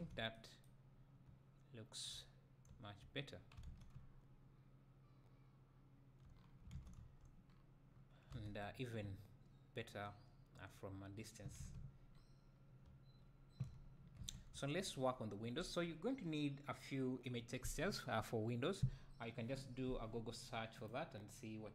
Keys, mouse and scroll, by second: 1.4 `, 2.3 scroll down 2, 2.7 click, 2.7 `, 4.0 right click, 6.3-6.9 scroll down 2, 7.4-7.9 scroll down 2, 7.9-8.3 scroll up 2, 8.3 alt+a, 9.0 `, 9.2-9.6 middle drag.